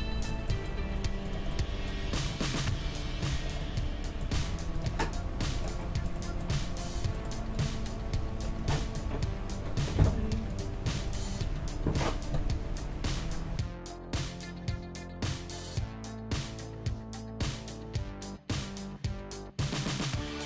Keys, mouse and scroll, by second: 0.8 g, 2.1 g, 2.7 s, 4.4 g, 7.2-8.9 middle drag, 7.6 click, 7.7 Tab, 9.0 g, 11.0-13.2 right drag, 13.6 \, 19.0-20.4 middle drag, 20.1 KP_1.